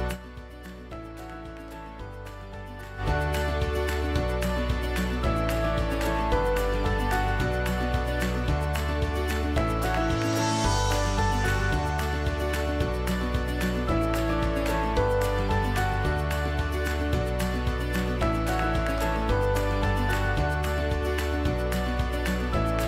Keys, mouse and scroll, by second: 9.5-12.0 alt+shift+drag.